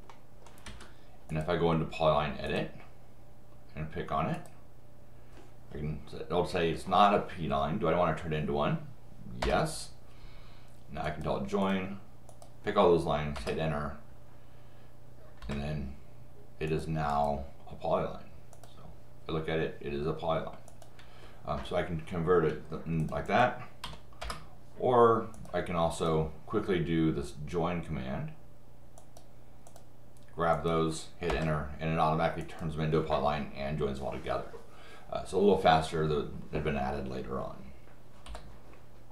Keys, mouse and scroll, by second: 0.1 middle click, 0.7 Escape, 1.3 click, 2.5 click, 4.3 click, 9.4 Return, 11.0 click, 11.6 click, 12.3 click, 13.4 Return, 15.4 Return, 16.7 click, 17.1 click, 18.5 click, 20.7 click, 23.0 click, 23.3 click, 24.2 Return, 25.3 click, 25.9 click, 29.0 click, 29.7 click, 30.5 click, 31.3 Return, 32.4 click.